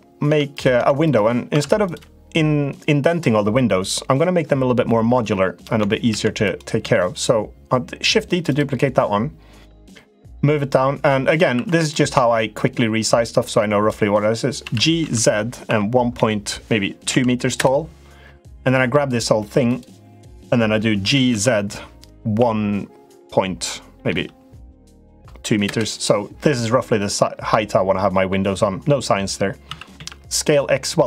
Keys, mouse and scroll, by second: 0.0 Tab, 0.3 click, 0.5 Tab, 0.8 click, 1.3 Tab, 5.8 shift+d, 6.5 s, 9.5-11.1 drag, 11.3 2, 11.5 click, 12.3-13.6 drag, 14.4 g, 18.5 3, 18.8 click, 19.4 click, 20.8 g, 27.3 middle click, 29.4 s.